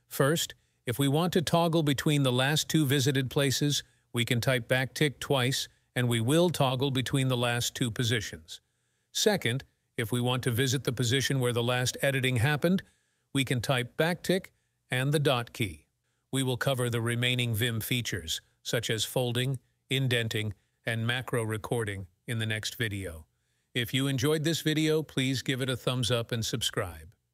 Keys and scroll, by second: 13.3 `, 13.3 ..